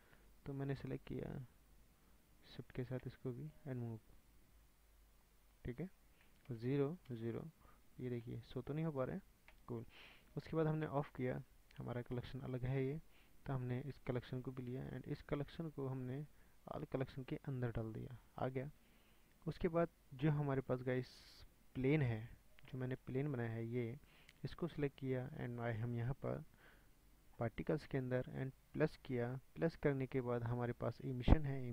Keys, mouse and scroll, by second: 0.2 ctrl+z, 2.7 shift+click, 3.9-5.3 drag, 5.3-6.1 scroll up 8, 6.1 scroll down 3, 6.5 KP_0, 7.1 KP_0, 7.8 scroll up 2, 8.3-15.0 shift+middle drag, 15.5 click, 16.9 click, 18.3 click, 20.5-21.0 scroll down 5, 21.0-21.6 middle drag, 21.6 scroll down 1, 21.8-22.3 middle drag, 22.3 scroll up 1, 22.4 scroll down 5, 22.7-23.0 middle drag, 23.0 scroll up 1, 23.6 click, 29.0 drag.